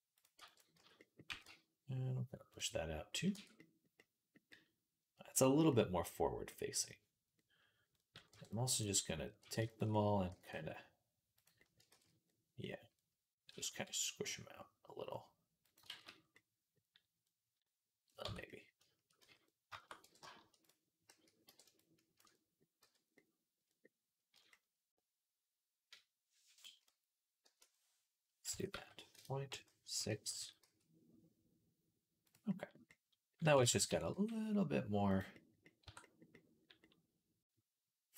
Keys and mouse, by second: 0.0 right click, 0.2 b, 0.6 z, 0.8-2.3 right drag, 1.1 g, 2.3-4.7 drag, 3.2 Tab, 4.7-8.1 right drag, 8.1-12.2 drag, 8.1 b, 9.2 b, 10.1 s, 11.7 ctrl+z, 12.2 right click, 12.3-14.7 right drag, 13.3 s, 15.7 ctrl+z, 17.9-22.9 right drag, 18.1 Tab, 19.0 z, 19.9 b, 20.9 a, 21.3 b, 22.6 z, 22.9-24.0 drag, 24.0-26.5 right drag, 27.2 shift+l, 27.6-31.3 right drag, 28.3 s, 29.4 ., 30.2 s, 31.3-34.9 drag, 33.4 ctrl+z, 33.7 s, 34.9-37.7 right drag, 35.7 Tab, 37.7-38.1 drag.